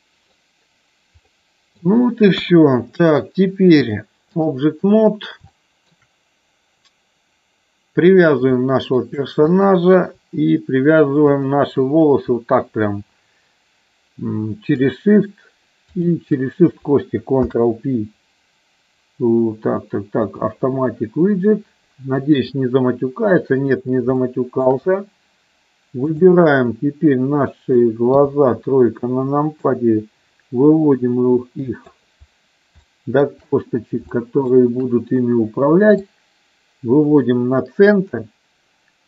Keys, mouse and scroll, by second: 1.3 middle click, 2.3 KP_1, 3.9 click, 5.0 middle click, 5.5 shift+middle click, 8.6 shift+middle click, 9.4 click, 16.0 shift+click, 17.3 ctrl+p, 24.2 shift+middle click, 26.2 click, 26.7 middle click, 28.2 KP_3, 29.5-32.0 drag, 32.8 shift+middle click, 34.2 shift+middle click, 35.9-39.0 drag.